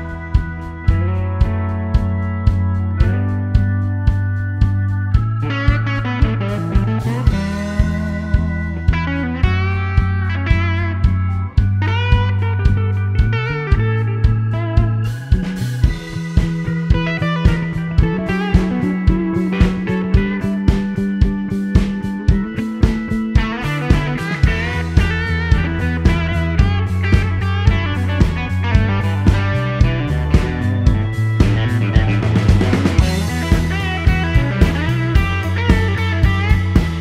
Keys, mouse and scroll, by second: 3.9-4.4 scroll down 1, 4.4-6.0 middle drag, 6.1-7.3 middle drag, 7.8 l, 8.8 click, 9.9 click, 10.8 click, 11.8 click, 13.0 click, 13.8 click, 14.8 click, 15.7 click, 17.6 click, 18.2 click, 19.0 click, 20.0 click, 20.5 middle click, 21.8 click, 22.6 click, 23.6 click, 24.3 click, 25.3 click, 26.3 click, 27.4 click, 28.3 click, 28.8 middle click, 29.3-29.8 scroll up 1, 30.1 click, 31.0 click, 32.0 click, 33.4 click, 33.9 right click, 34.3 scroll down 1, 34.5-36.5 middle drag.